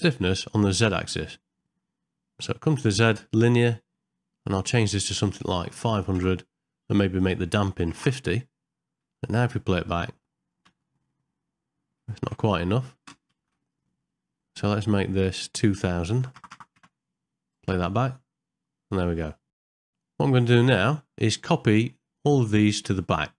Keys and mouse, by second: 1.5 middle click, 4.5-6.3 drag, 5.8 KP_0, 7.3 click, 9.2 ctrl+middle click, 9.6 shift+middle click, 10.0 middle click, 10.7 space, 12.2 shift+Left, 13.1 space, 13.5 shift+Left, 15.3-16.9 drag, 16.3 KP_0, 17.7 space, 19.1 middle click, 19.6 shift+Left, 19.6 space, 19.7 shift+middle click, 20.0 ctrl+middle click, 21.4 middle click.